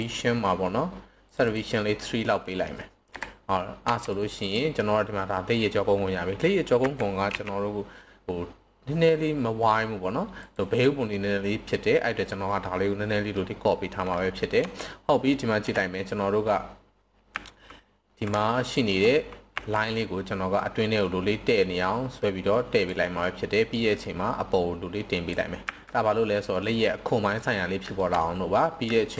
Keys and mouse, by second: 0.0 click, 1.4 click, 2.2-2.6 middle drag, 2.9 KP_7, 3.9 Tab, 4.1 right click, 6.7 s, 7.2 y, 10.4 click, 11.3-11.9 middle drag, 12.2 middle click, 13.3-14.2 middle drag, 14.6 Tab, 14.9 middle click, 15.6 KP_1, 17.3 z, 19.5 s, 22.7 click, 24.1-25.2 drag, 25.6 z, 26.3 middle drag, 27.9 shift+middle click, 28.2-28.5 middle drag, 28.9 shift+middle click.